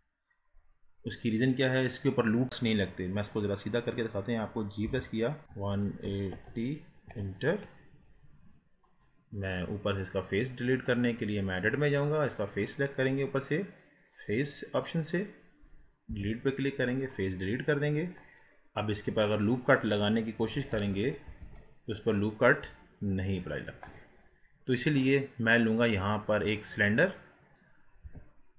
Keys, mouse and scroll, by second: 4.9 g, 5.4 r, 8.4 scroll down 5, 8.7 scroll up 4, 9.0-9.8 middle drag, 9.8-10.8 scroll up 1, 10.8-12.4 drag, 14.0 click, 17.5-19.0 middle drag, 19.0-19.6 scroll up 2, 19.6 click, 20.7 ctrl+r, 24.2-25.9 middle drag, 25.9-28.0 drag, 28.0 Delete, 28.4-28.5 scroll down 1.